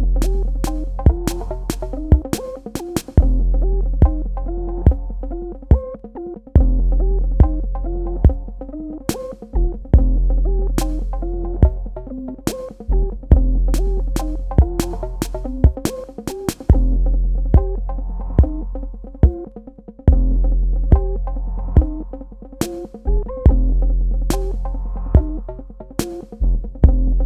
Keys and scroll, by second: 1.3 KP_Subtract, 2.6 space, 6.2 space, 8.0-9.7 typing, 12.1 m, 14.6 v, 16.0 m, 18.0 KP_Add, 24.4 KP_Subtract, 26.9 v.